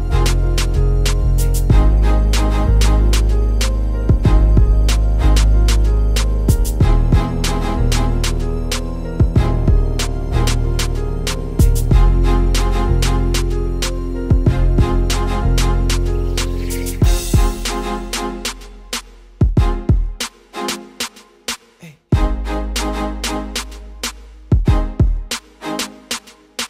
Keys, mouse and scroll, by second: 0.4 KP_0, 1.5 click, 2.9 g, 4.9 click, 6.3 click, 7.2 KP_0, 8.7 click, 13.6 click, 18.2 click, 18.9 click, 19.6 click, 20.9 click, 23.2 click, 24.1 click, 26.5 click.